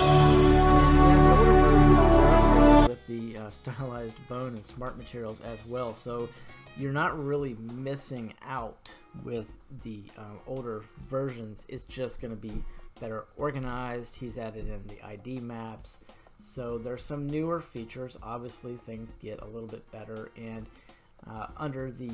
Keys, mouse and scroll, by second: 2.0-2.3 scroll up 2, 2.3-3.5 middle drag, 4.3-4.8 shift+middle drag, 4.9-5.8 middle drag, 11.0-12.1 shift+middle drag, 12.8 middle click, 13.5-13.9 scroll up 1, 16.9-18.6 scroll up 3, 18.6-19.3 scroll down 1, 19.3-20.1 scroll down 1.